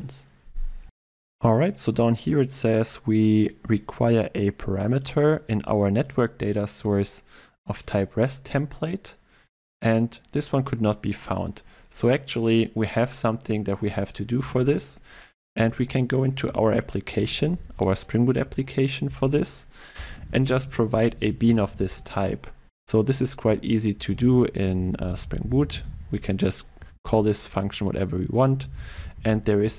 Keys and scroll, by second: 14.5 ctrl+e, 23.1 Return.